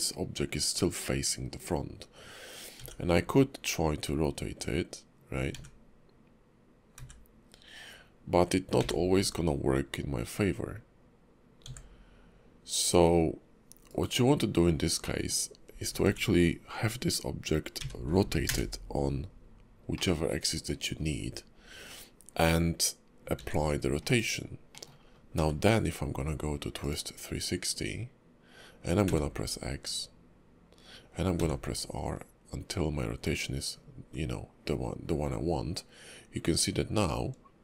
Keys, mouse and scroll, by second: 15.0 middle click, 16.0 r, 19.9 middle click, 20.8-22.0 scroll up 3, 23.3 ctrl+a, 24.7 middle click, 25.0-25.4 scroll down 1, 25.4 q.